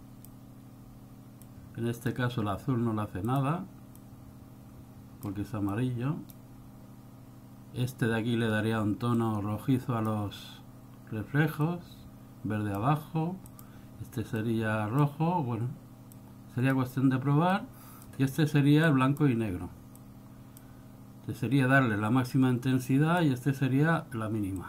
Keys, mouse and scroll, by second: 1.6 click, 3.4 click, 4.2 click, 5.9 click, 9.3 click, 11.8 click, 13.7 click, 14.5 click, 16.3 click, 17.7 click, 19.2 click, 20.1 click, 22.5 click.